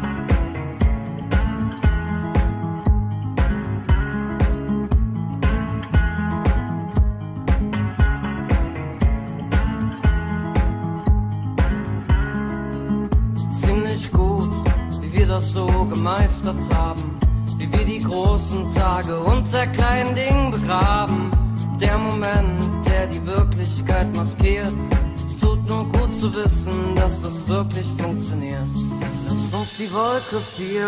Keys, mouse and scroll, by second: 3.4 p, 10.4 Delete, 15.0 ctrl+alt+shift+c, 21.3 KP_Decimal, 21.6 KP_Decimal, 27.6 middle click, 29.3 middle click.